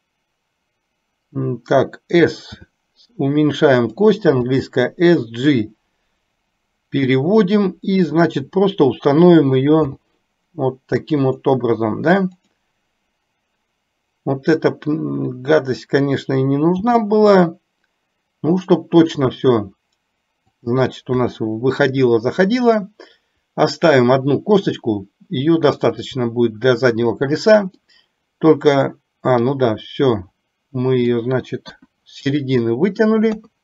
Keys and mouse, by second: 2.5 s, 4.6 g, 8.3 click, 10.0 g, 12.6 click, 16.9 g, 27.9-31.4 middle drag, 31.8 KP_1, 33.4 KP_3.